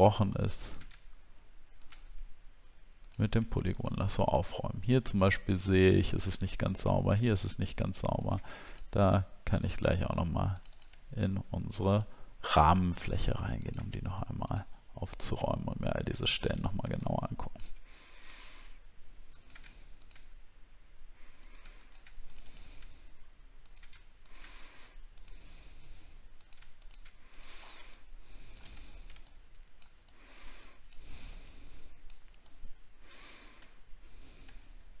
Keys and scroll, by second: 28.9 alt+scroll down 6, 34.4 alt+scroll down 6, 34.6 alt+scroll up 1.